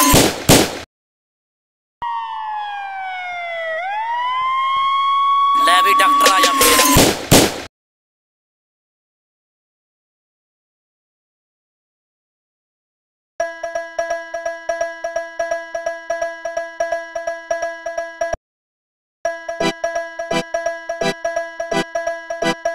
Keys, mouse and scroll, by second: 1.0-1.9 drag, 12.5 click, 13.5 click, 17.7-19.0 drag, 20.8-22.7 drag.